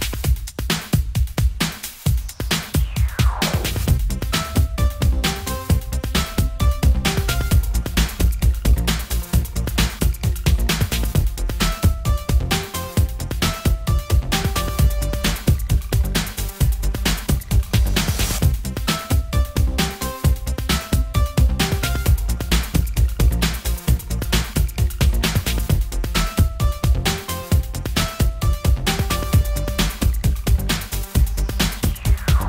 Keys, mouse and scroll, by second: 0.6 KP_7, 2.6 b, 6.7 middle click, 7.9 middle click, 9.1 p, 12.5 click, 13.2 click, 14.6 click, 16.1 n, 16.7 n, 18.1 click, 21.0 middle click, 21.1 click, 22.6-24.5 drag, 24.5 middle click, 27.8 click, 30.7 middle click, 31.7 click.